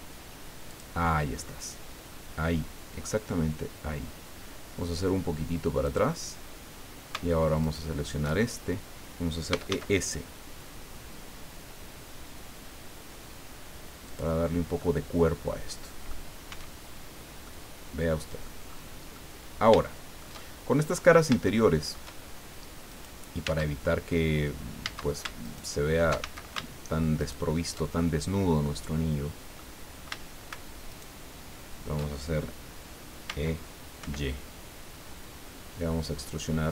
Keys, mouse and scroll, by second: 0.7 click, 5.8 click, 7.6 alt+shift+right click, 8.4-8.7 alt+shift+scroll down 2, 9.2-10.2 typing, 14.1 click, 14.5 scroll down 2, 14.7-16.3 drag, 16.5 Tab, 17.0 scroll down 2, 17.5-18.6 drag, 18.7 scroll up 2, 19.1-20.9 drag, 20.9-21.3 shift+scroll up 2, 21.4 shift+middle click, 22.9 right click, 23.4 Tab, 24.8 a, 25.4 alt+shift+right click, 26.2 alt+shift+a, 27.2 alt+shift+right click, 27.9-29.7 alt+shift+middle drag, 30.9 alt+shift+right click, 33.2 e, 34.0 y.